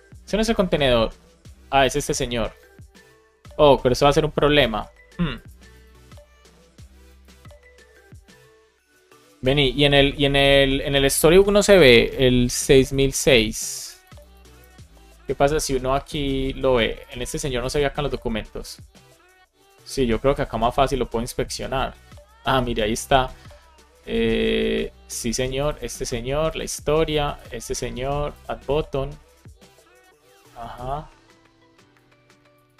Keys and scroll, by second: 13.4 Down, 14.5 Return.